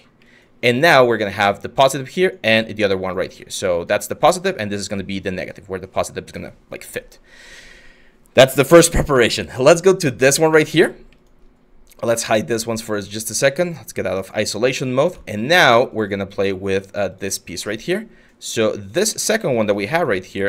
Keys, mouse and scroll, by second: 19.2 w.